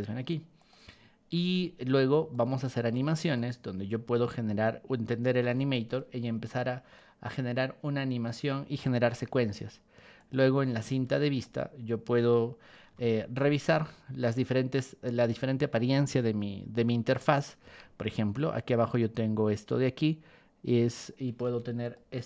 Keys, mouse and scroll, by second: 0.6 click, 1.4 Escape, 2.3-3.4 drag, 2.9 ctrl+1, 4.3 ctrl+click, 5.7 ctrl+shift+click, 6.9 click, 9.1 Escape, 10.2 click, 10.9 ctrl+1, 11.4 click, 12.9 b, 14.2-15.4 ctrl+drag, 17.6 Escape, 21.4 ctrl+1, 21.8 click, 22.1 click.